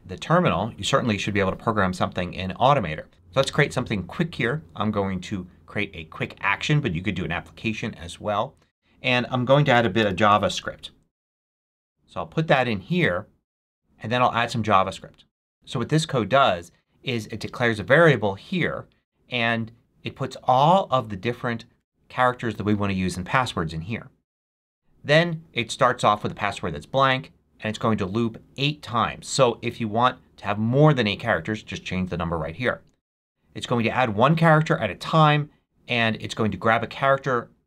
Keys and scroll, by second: 9.4-11.4 typing.